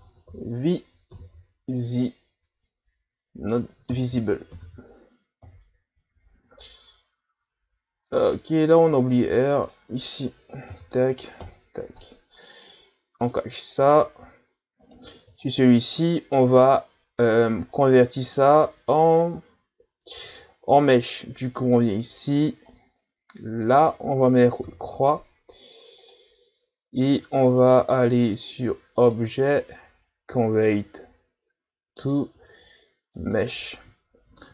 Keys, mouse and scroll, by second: 8.1-11.2 drag, 13.2-14.8 drag, 14.8 right click, 15.5-16.0 shift+scroll down 1, 16.0-21.6 middle drag, 21.6-26.6 drag, 27.0-27.4 middle drag, 27.4-28.1 scroll up 2, 29.0-32.0 drag, 34.1 Tab.